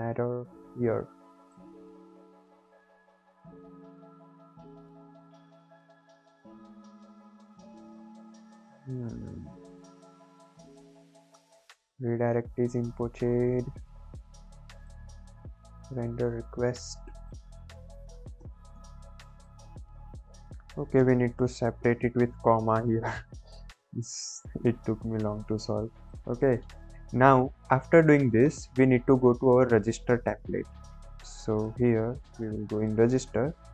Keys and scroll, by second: 18.3 Return, 18.7 BackSpace, 22.8 ctrl+s.